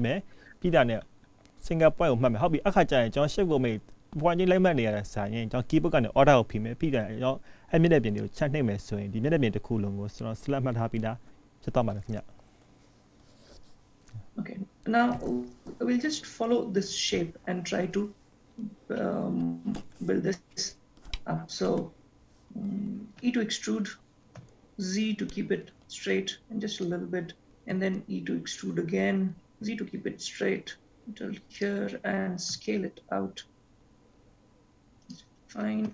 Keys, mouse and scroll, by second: 23.3 e, 28.1 e, 32.7 s.